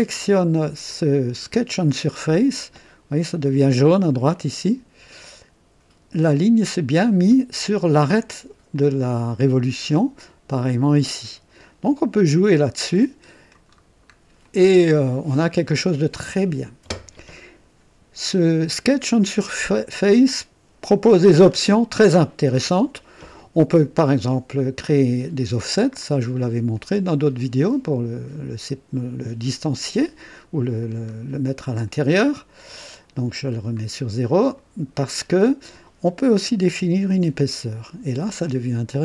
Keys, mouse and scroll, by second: 4.0-4.4 scroll up 1, 4.4 right click, 8.7-10.0 drag, 12.6-13.7 drag, 13.7-14.1 scroll down 2, 14.1 scroll up 2, 14.4-17.6 drag, 18.9 click, 24.0 click, 25.8-26.2 scroll up 1, 26.7 click, 30.8-31.1 scroll down 1, 31.9 click, 32.5-32.9 scroll down 1, 33.4 scroll down 1, 34.6 click, 36.4 KP_2, 36.8 KP_0, 37.1 KP_Enter, 38.4-39.0 drag.